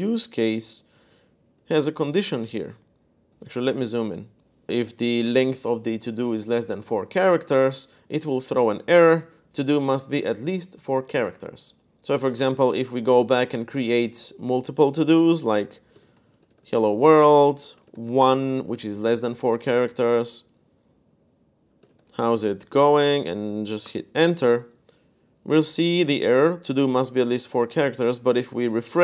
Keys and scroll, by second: 0.0-2.3 typing, 3.5 super+=, 3.9 super+=, 4.7 typing, 6.1 Escape, 8.0-9.0 typing, 12.2 super+Tab, 15.4-18.3 typing, 21.3-23.3 typing, 23.6 Return, 28.3 super+r.